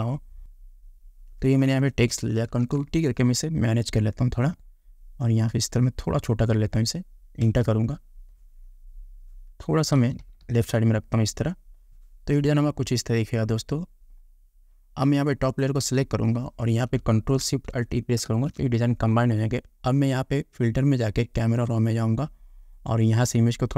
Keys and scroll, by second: 2.8 ctrl+t, 7.7 Return, 10.3 Left.